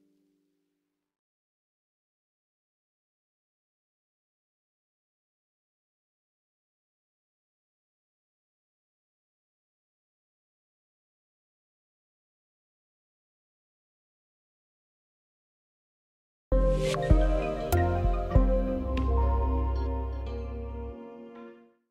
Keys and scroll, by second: 12.1 ctrl+q.